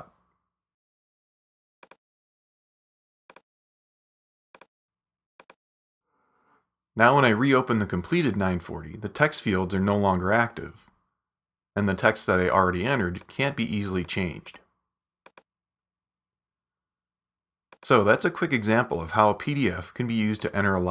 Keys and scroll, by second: 8.8 super+=.